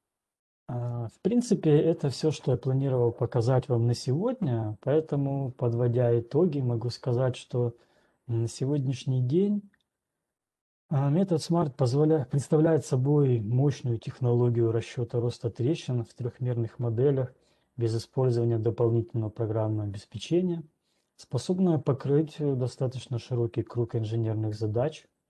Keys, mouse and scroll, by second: 1.2-1.7 scroll, 1.7-2.7 scroll, 3.3-3.7 scroll.